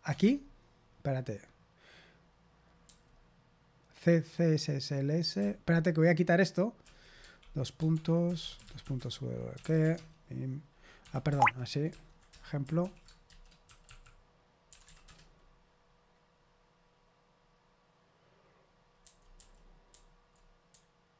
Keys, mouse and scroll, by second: 0.0 Escape, 2.8 j, 7.9 Escape, 8.1-10.3 typing, 11.0 Escape, 11.3 ctrl+p, 11.8 ctrl+p, 12.3 Return, 13.2-15.3 typing, 19.0-21.1 typing.